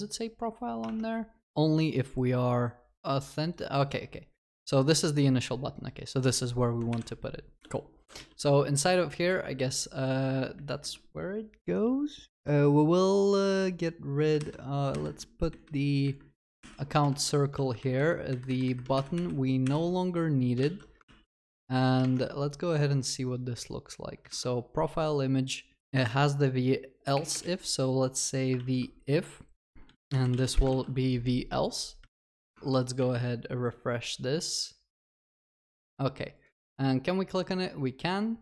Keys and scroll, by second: 8.2 ctrl+v, 14.4 alt+shift+Up, 16.6 ctrl+y, 17.1 ctrl+alt+shift+l, 18.9 ctrl+y, 20.6 ctrl+alt+shift+l, 24.4 ctrl+s, 28.6 ctrl+s.